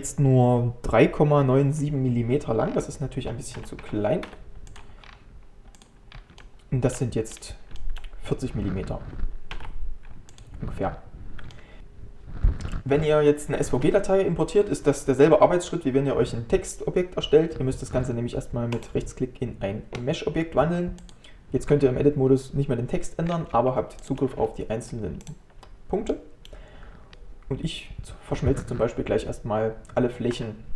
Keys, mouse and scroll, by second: 2.7 scroll down 1, 3.6 s, 6.1 scroll down 1, 6.4 shift+middle click, 7.3 scroll down 2, 7.8-9.6 shift+middle drag, 9.6 ctrl+a, 11.5-13.3 shift+middle drag, 18.7-23.3 right drag, 23.3 scroll up 2, 23.6 1, 26.1 middle click, 27.1 a.